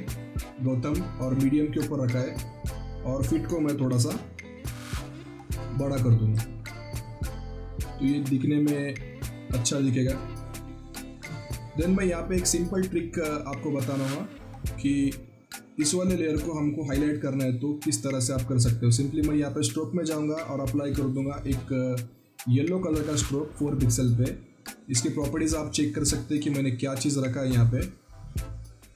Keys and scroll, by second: 3.8 ctrl+t, 6.7 ctrl+t.